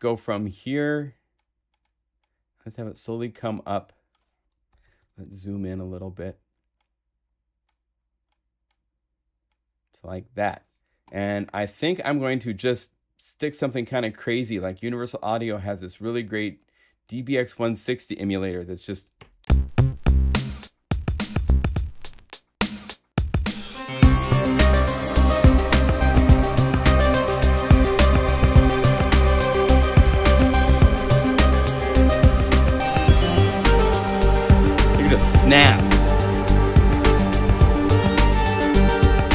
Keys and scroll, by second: 4.7 super+Right, 19.4 Home, 37.6 super+Up, 38.0 super+Left.